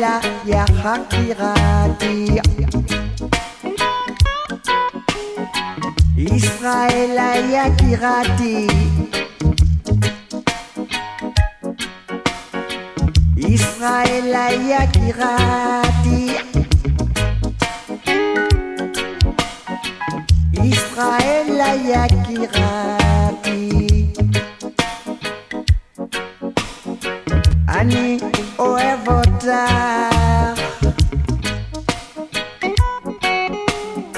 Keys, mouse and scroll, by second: 1.3 scroll down 1, 2.6-6.1 drag, 16.7 KP_7, 19.3-27.3 drag.